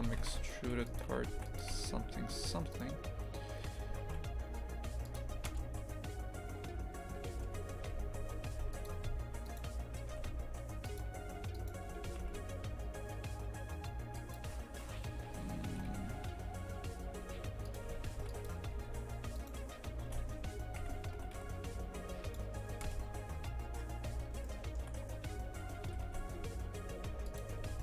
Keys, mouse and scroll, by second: 0.0 Tab, 0.2 shift+f, 1.1 a, 1.3 ctrl+r, 2.3 3, 2.7 right click, 3.9 e, 5.5 KP_0, 7.3 KP_0, 7.8 shift+f, 9.0 2, 9.5 right click, 10.1 g, 11.5 right click, 12.1 g, 15.7 g, 17.9 a, 18.2 ctrl+r, 19.4 right click, 20.0 ctrl+b, 21.2 g, 22.8 KP_0, 23.8 scroll up 1, 24.4 shift+middle click, 25.0-25.9 scroll up 1, 25.9 g, 27.6 ctrl+b.